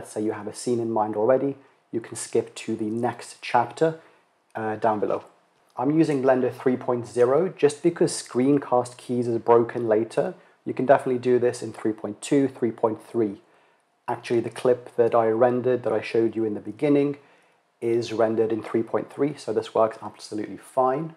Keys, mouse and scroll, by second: 20.6 click.